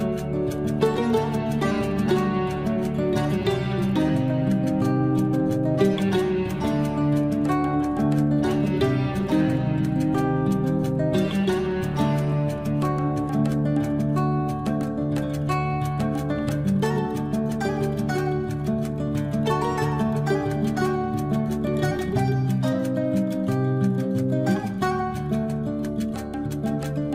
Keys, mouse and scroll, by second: 0.2 space, 1.2 l, 2.2 click, 6.2-6.5 scroll up 1, 7.2 click, 7.8 space, 9.1 l, 9.9 click, 10.0 click, 12.0 space, 12.6 scroll up 1, 14.3 click, 15.3 Delete, 16.4 click, 17.8 Escape, 18.0 scroll up 1, 19.0 click, 21.4 click, 25.4 scroll up 1, 26.1 click, 26.5-26.8 scroll down 1.